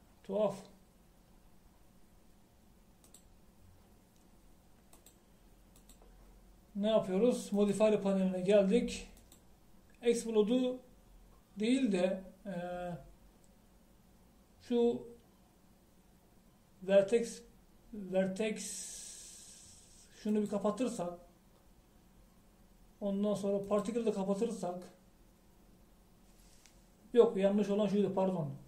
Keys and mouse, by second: 4.4-5.6 middle drag.